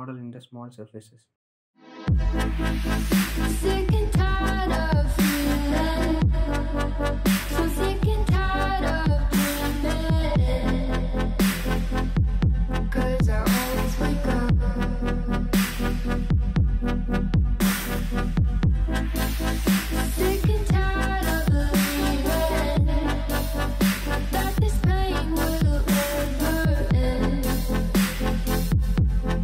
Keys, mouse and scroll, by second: 1.0 r, 3.1 g, 5.2 r, 6.6 middle click, 7.5 click, 8.5 scroll down 2, 8.8-9.2 middle drag, 9.2 scroll up 1, 9.3 middle click, 10.3 click, 13.6 click, 15.2 click, 17.0-19.9 drag, 20.8 click, 21.1-22.3 drag, 22.8 click, 23.1-24.1 drag, 24.1-25.5 middle drag, 25.5 scroll up 2, 25.7 click, 26.0-26.3 scroll down 2, 26.3-27.3 middle drag, 27.3 click, 27.6 click, 27.8 click, 28.0 click, 28.3 click, 28.5 click.